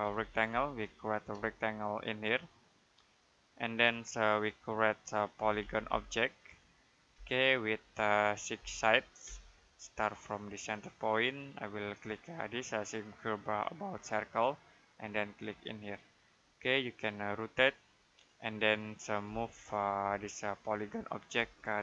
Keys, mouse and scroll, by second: 0.0-1.2 typing, 2.1 click, 5.0-7.0 typing, 8.4 6, 9.1 space, 11.0 click, 13.9 click, 16.6 middle click, 19.1 m, 19.9 space, 20.5 click, 21.2 space, 21.5 click.